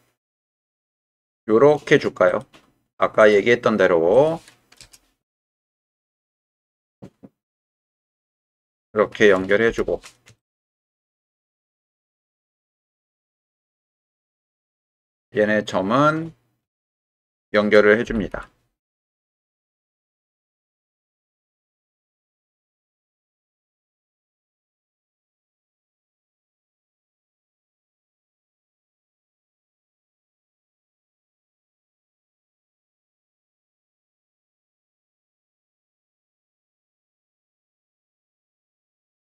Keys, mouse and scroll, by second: 0.5 k, 6.2 k, 10.4 shift+click, 11.9 k, 16.1 click, 17.1 shift+click, 18.1 m, 19.9 shift+click, 20.9 m, 24.0 shift+click, 25.3 shift+click, 26.6 shift+middle click, 28.1 g, 29.3 click, 30.3 click, 30.8 g, 32.1 click, 32.6 click, 34.0 click, 34.5 click, 34.9 g, 36.2 click.